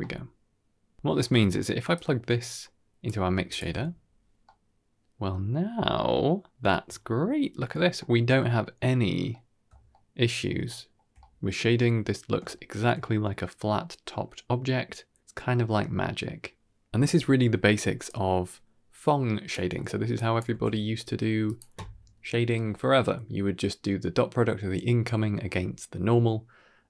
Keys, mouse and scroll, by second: 0.7 scroll down 2, 0.8 middle click, 1.2 middle click, 1.8-2.9 drag, 4.3-6.6 middle drag, 6.7-7.4 shift+middle drag, 7.5-8.5 scroll up 1, 8.5 scroll up 3, 8.6-9.4 middle drag, 9.5-10.0 scroll down 4, 10.0-10.4 middle drag, 10.6-11.1 shift+middle drag, 11.3 shift+middle click, 11.6 shift+middle drag, 13.0 shift+middle drag, 13.5 shift+middle drag, 16.2-16.5 middle drag, 17.1 middle click, 17.8 click, 18.2 ctrl+h, 18.7-19.2 scroll up 4, 19.2 middle click, 19.6-21.0 drag, 21.3 middle click, 21.7 drag, 22.0 g.